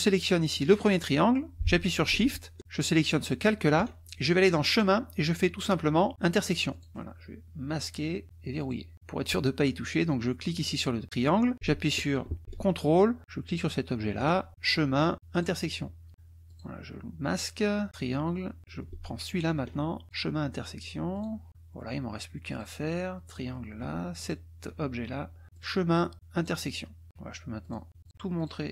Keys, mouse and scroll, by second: 0.4 click, 3.0 ctrl+click, 4.7 click, 6.9 click, 7.9 click, 8.6 click, 10.7 click, 13.6 ctrl+click, 14.6 click, 15.3 click, 16.6 click, 17.9 click, 19.3 ctrl+click, 20.0 click, 21.2 click, 22.5 click, 23.3 click, 24.2 ctrl+click, 25.6-25.9 drag, 26.5 click, 27.7 click, 28.1 click, 28.4 click.